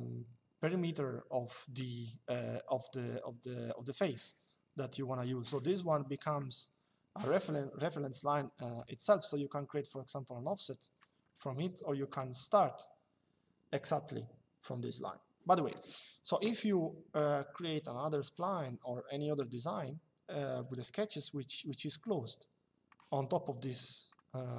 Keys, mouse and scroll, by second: 5.2 click, 9.6 click, 11.0 Escape, 11.8 l, 16.8 click, 22.6 click, 23.8 click.